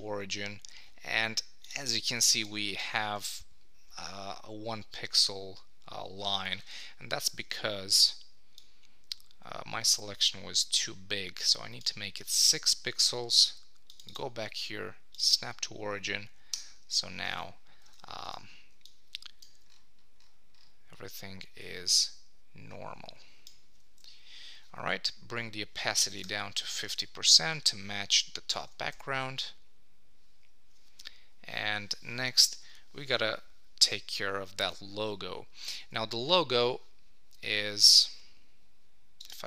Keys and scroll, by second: 8.8 super+t, 12.5 Return, 16.5 Return, 17.9 super+s, 26.9 super+s, 28.6 super+1, 35.8 super+Tab.